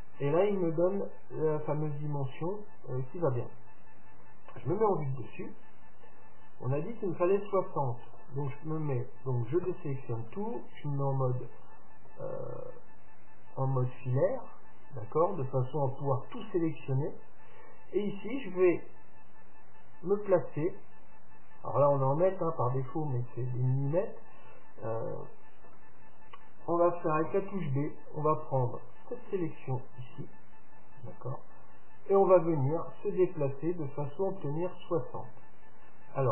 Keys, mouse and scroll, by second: 0.3-2.3 middle drag, 4.9 KP_7, 5.9-9.3 middle drag, 9.8 a, 10.3 z, 12.9-15.5 middle drag, 15.6 middle click, 25.1-27.1 middle drag, 27.4 b, 32.8-34.7 drag.